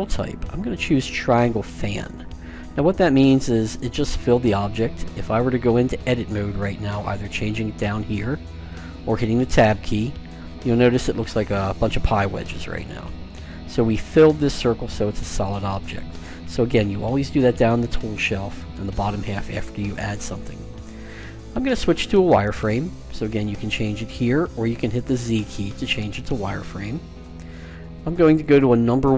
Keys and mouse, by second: 3.9-6.3 middle drag, 8.8 click, 9.2 Tab, 10.2-12.2 middle drag, 23.3-24.7 drag, 24.9 z, 25.4 z, 28.7 KP_1.